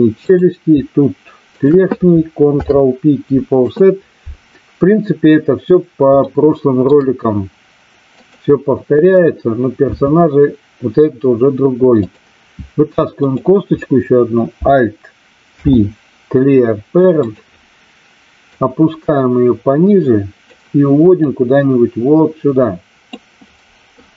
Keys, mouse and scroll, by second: 0.1 click, 1.5 shift+click, 2.5 ctrl+p, 6.2 shift+middle click, 9.9 e, 11.9 click, 13.1 click, 15.5 alt+p, 18.5-20.5 drag, 21.2-23.0 drag.